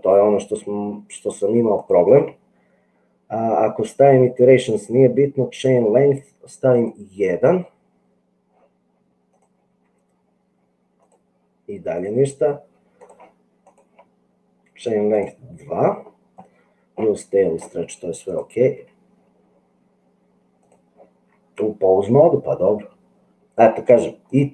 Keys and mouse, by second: 6.7 click, 9.9 g, 12.2 click, 18.9 g.